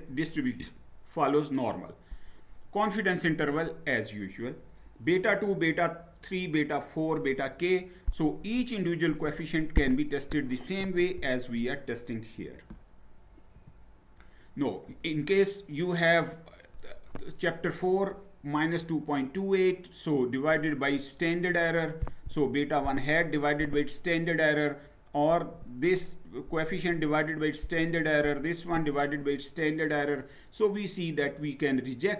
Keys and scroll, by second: 13.6 Down.